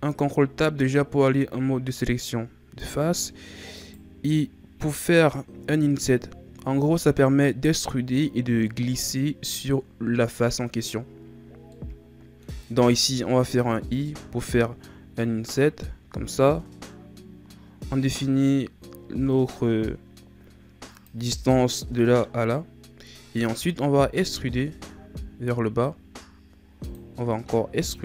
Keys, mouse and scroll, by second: 3.8 right click, 11.7-13.7 middle drag, 13.7 i, 24.3 e, 27.4 e.